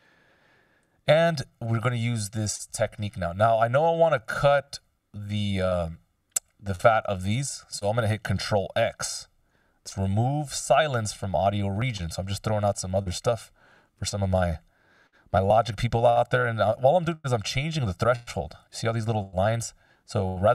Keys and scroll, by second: 0.8 F16, 9.0 ctrl+x.